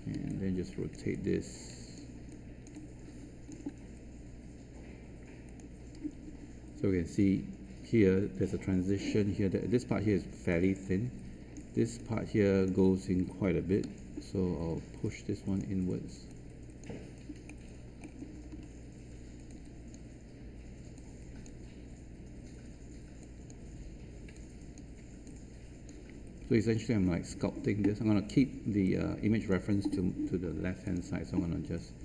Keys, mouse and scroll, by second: 0.6 alt+click, 1.1 alt+click, 3.3 alt+right click, 5.4 click, 10.4 right click, 11.9-13.3 drag, 13.8 w, 15.0 click, 19.4-25.2 drag, 25.2 click, 27.5 scroll down 1, 28.8-30.3 drag.